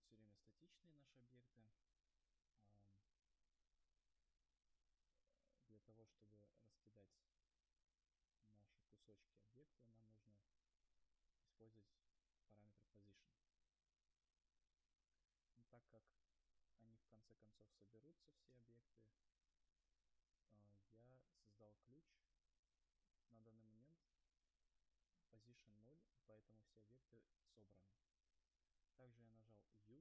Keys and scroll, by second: 21.8 u.